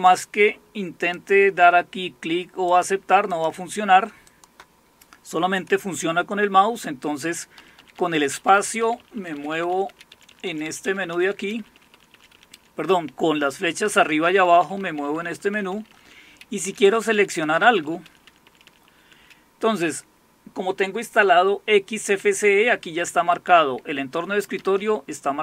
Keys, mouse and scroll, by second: 0.0-1.2 drag, 1.3 click, 2.7-5.3 drag, 7.6 End, 7.8 Down, 7.9 Down, 8.1 Down, 8.3 Down, 8.7 Down, 8.8 Down, 9.0 Down, 9.1 Down, 9.3 Down, 9.5 Down, 9.8 Down, 10.1 Up, 10.2 Up, 10.4 Up, 10.6-11.7 Up, 13.9 Down, 14.1 Down, 14.3 Down, 14.4 Down, 15.5 Down, 16.6 Up, 16.8 Up, 17.0 Up, 17.2-18.5 Up, 24.6 Down, 24.8 Down.